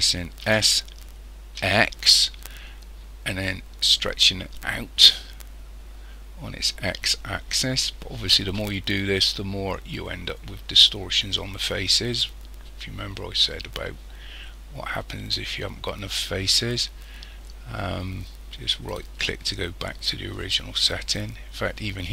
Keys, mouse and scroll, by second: 0.5 s, 21.7-22.1 scroll up 3.